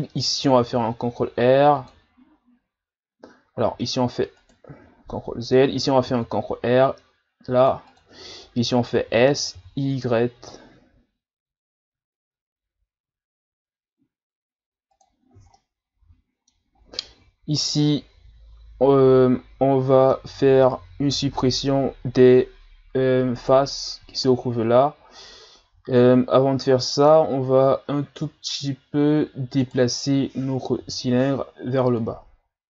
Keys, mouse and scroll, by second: 0.6 ctrl+r, 5.1 ctrl+z, 9.0 s, 15.5-16.8 middle drag, 16.8-17.9 scroll up 2, 17.9-20.4 middle drag, 20.4-22.3 scroll up 1, 22.3 a, 23.4 right click, 25.3-28.3 middle drag, 29.6 right click, 30.8 l, 32.0 click.